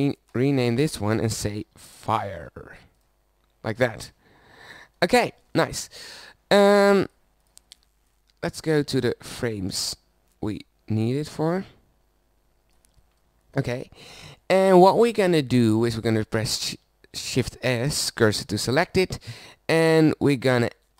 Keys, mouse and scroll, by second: 0.3-3.0 drag, 4.5 middle click, 7.0-8.1 drag, 9.3 middle click, 10.0-11.4 scroll up 1, 11.4 middle click, 13.1 middle click, 16.7 shift+s.